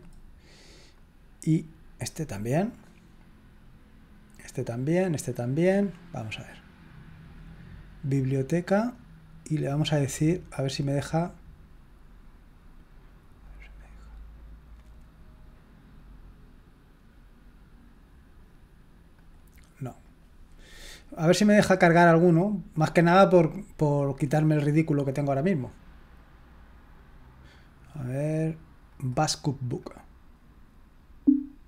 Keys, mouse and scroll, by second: 2.1 click, 2.7 click, 4.6-6.1 drag, 6.2 click, 8.9 click, 11.0 right click, 13.4 click, 19.1 click, 20.0 click, 22.3 click, 23.6 click, 23.9 click, 24.9 click, 28.9 click, 29.8 click.